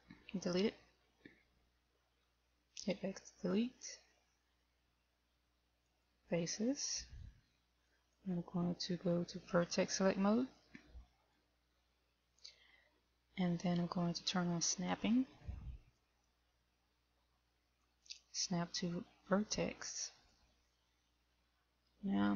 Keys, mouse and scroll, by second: 2.6 x, 10.9 click, 16.5 click, 18.2 click.